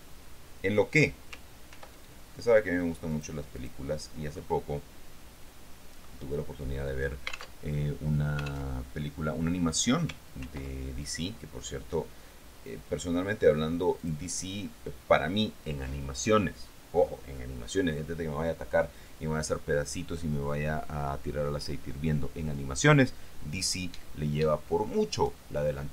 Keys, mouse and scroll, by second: 1.9 ctrl+r, 3.6 click, 4.5-6.5 drag, 7.8 alt+Tab, 8.9 alt+Tab, 10.6 ctrl+r, 11.2 ctrl+click, 14.2 click.